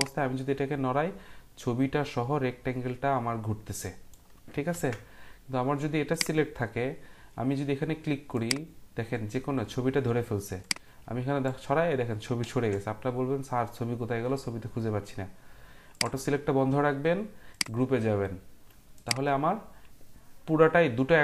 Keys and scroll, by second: 4.7 ctrl+z, 12.4 ctrl+z.